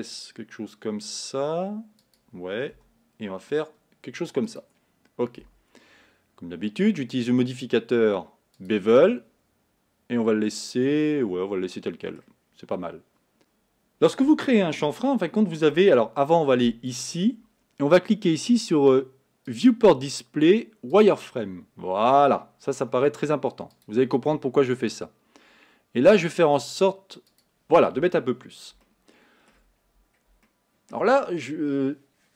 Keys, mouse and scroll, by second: 2.8 e, 5.4 Tab, 8.7-11.8 drag, 11.8 middle click, 12.5-13.2 scroll up 2, 13.2-15.0 scroll down 2, 15.3-21.3 shift+middle drag, 21.3 click, 21.8-22.6 scroll up 2, 22.6-25.7 scroll down 1, 26.7 click, 28.9 shift+middle click, 29.8-30.5 scroll up 2, 30.5-32.3 shift+middle drag.